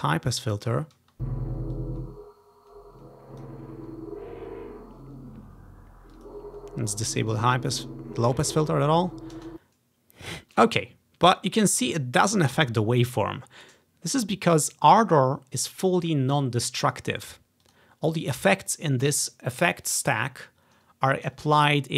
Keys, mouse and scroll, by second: 1.1 space, 1.9-3.6 drag, 6.3 click, 7.4 click, 9.5 space, 10.4-14.7 drag, 17.8-19.6 drag.